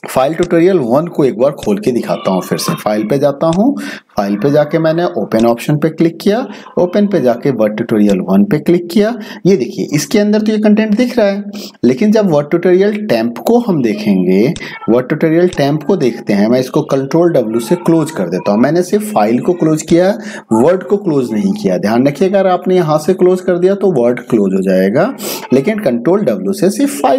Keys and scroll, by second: 17.8 ctrl+w.